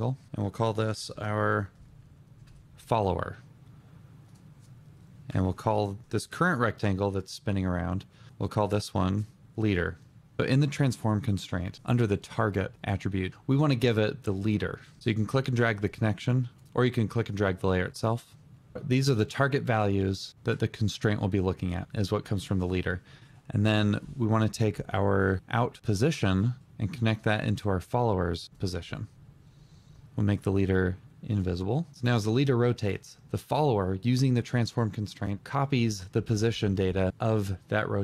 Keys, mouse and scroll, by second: 0.3 Return, 0.9-2.7 typing, 5.3 Return, 7.2 double click, 9.4 Return.